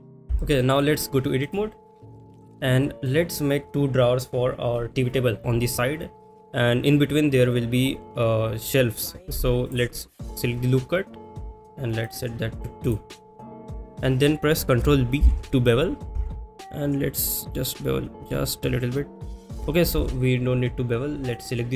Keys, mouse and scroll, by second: 0.4 shift+middle drag, 0.7 click, 1.6-2.2 drag, 2.8 middle click, 9.7 click, 11.2 click, 12.0 click, 12.8 click, 19.4 shift+click, 19.9 ctrl+z, 21.3 click.